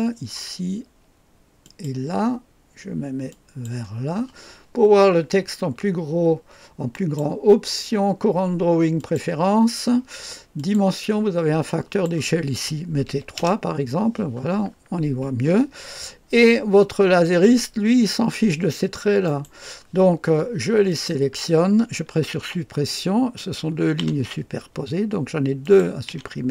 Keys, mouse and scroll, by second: 1.6 click, 3.3 click, 6.9 click, 9.0 click, 10.6 click, 11.1 click, 11.7 click, 13.1 KP_3, 13.4 Return, 15.6-16.1 scroll up 1, 19.2 right click, 20.9 click, 22.4 Delete, 23.4 click, 24.0 Delete, 25.6 click, 26.1 Delete.